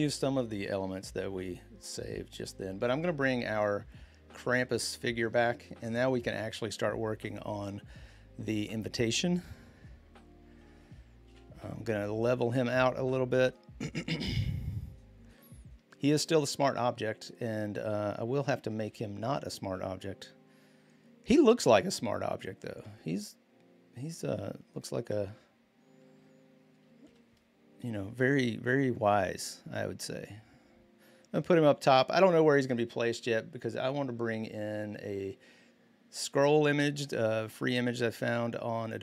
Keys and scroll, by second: 11.0 ctrl+t, 14.2 Return, 18.6 ctrl+t, 26.8 Return.